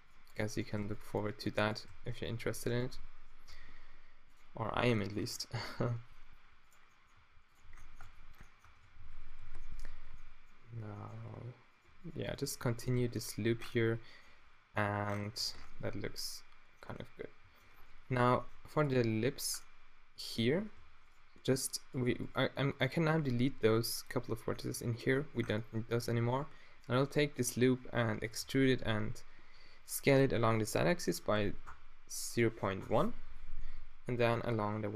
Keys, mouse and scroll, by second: 0.8 f, 1.9 f, 2.3 z, 2.7 Tab, 3.4 Tab, 4.2 click, 4.7 t, 5.2 Tab, 7.1 g, 7.5 click, 7.5 middle click, 7.5 right click, 7.6 z, 8.0 Tab, 8.6 Tab, 8.8 a, 9.0 a, 9.4 ctrl+n, 9.8 Tab, 11.2 Tab, 13.0 f, 13.5 a, 15.4 Tab, 18.1 Tab, 18.8 middle click, 19.7 middle click, 20.8 s, 23.3 x, 24.7 Tab, 26.0 Tab, 26.8 middle click, 26.9 middle click, 28.1 e, 28.4 s, 33.6-34.9 middle drag, 34.6 s.